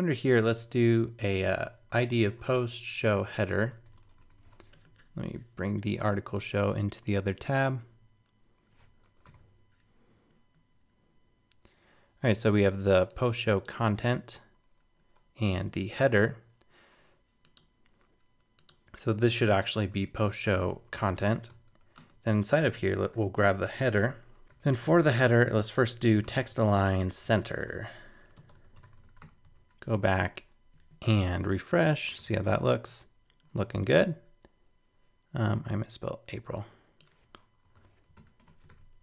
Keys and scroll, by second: 9.2 super+k, 9.2 super+b, 18.8 shift+super+Left, 29.5 super+s, 29.8 super+Tab, 32.1 super+r, 33.8 super+Tab, 38.1 super+s, 38.4 super+Tab, 38.7 super+r.